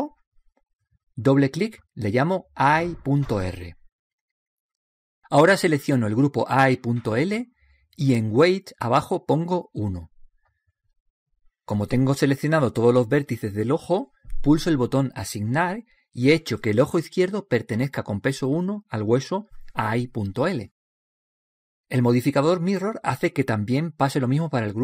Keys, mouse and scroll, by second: 2.1-4.8 drag, 7.9-11.2 drag, 15.8-17.6 drag.